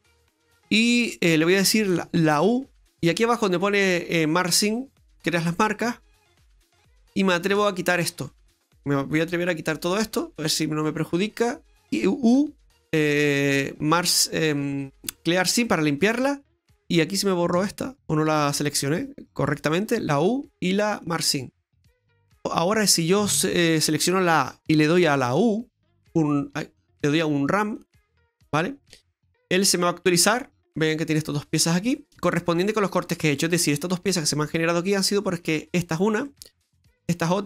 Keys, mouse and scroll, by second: 2.3 u, 7.0 right click, 7.7 shift+right click, 8.3 middle click, 9.2 shift+right click, 9.7 shift+right click, 12.4 u, 14.7 u, 16.9 right click, 18.3 ctrl+shift+right click, 19.9 u, 21.6 scroll down 2, 21.8 middle click, 23.2 a, 25.0 u, 27.0 u, 29.4-30.9 scroll down 2, 30.9 scroll down 1, 32.1 scroll down 1, 32.2 middle click, 34.8 middle click, 36.3 middle click.